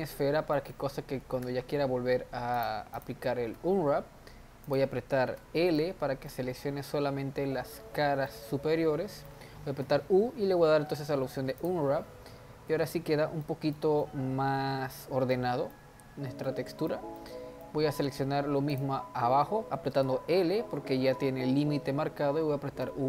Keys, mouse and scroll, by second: 0.1 middle click, 0.7 Tab, 1.2 a, 1.4 Tab, 2.6 click, 3.6 a, 4.7 click, 5.4 l, 5.8-9.8 middle drag, 9.8 u, 13.1 Tab, 13.4-17.8 middle drag, 17.8 Tab, 18.7 click, 20.0 l, 22.8 u.